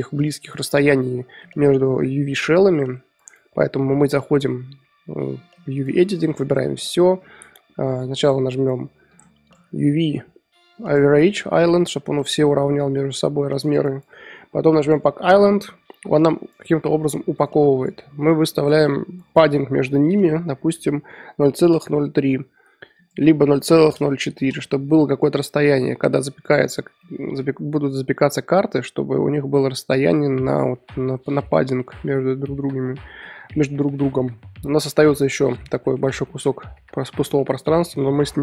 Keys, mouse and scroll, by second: 6.5 click, 6.6 a, 10.9-21.8 drag, 24.5-38.4 drag.